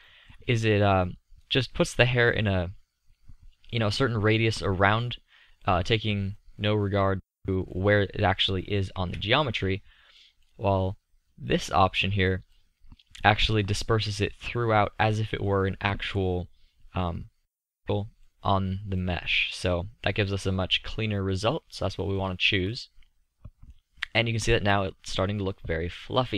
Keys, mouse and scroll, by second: 5.9-6.9 middle drag, 8.9 middle click, 9.0 KP_5, 13.3 middle click, 15.9 middle click, 18.1-19.3 middle drag, 20.4-21.4 middle drag, 25.6-26.3 middle drag.